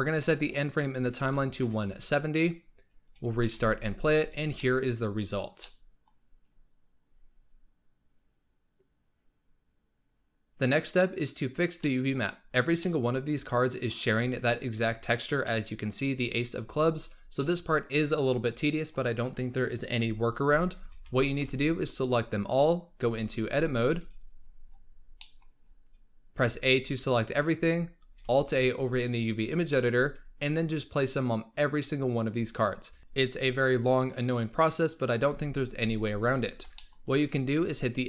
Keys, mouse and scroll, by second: 0.1-3.3 drag, 3.3 shift+middle drag, 3.5 space, 4.5-6.9 shift+middle drag, 6.9-9.9 scroll down 1, 10.1-12.5 middle drag, 12.5 scroll down 1, 12.7-14.0 middle drag, 14.0-15.3 scroll up 2, 15.3-16.5 middle drag, 16.5-17.3 scroll down 4, 17.3-20.3 middle drag, 20.8 z, 21.3 b, 22.9 Tab, 24.3-25.1 scroll down 10, 25.1 middle click, 25.5 scroll up 4, 26.3 a, 27.6-28.1 scroll up 3, 28.1 alt+a, 29.6-31.0 middle drag, 31.0-31.9 scroll down 10, 32.2-33.0 scroll up 9, 33.0-33.9 scroll down 2, 33.9-35.2 scroll up 4, 35.2 l, 36.3-36.7 scroll down 2, 36.7 shift+middle click, 37.3-38.0 scroll up 1.